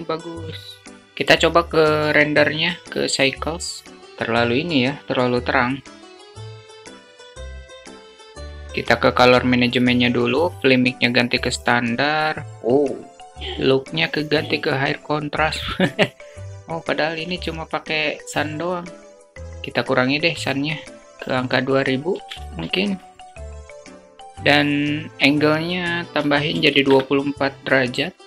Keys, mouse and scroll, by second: 0.2 middle click, 19.2 middle click, 19.6 KP_0, 21.3 0, 21.4 0, 22.0 middle click.